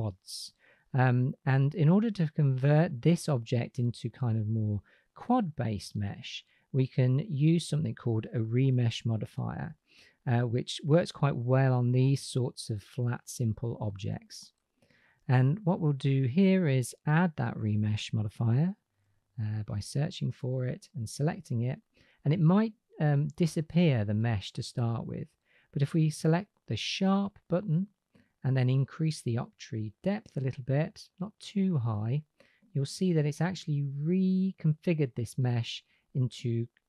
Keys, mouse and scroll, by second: 14.7-20.4 drag, 26.4 click, 29.2 click, 29.9 click, 31.1 click, 36.4 click.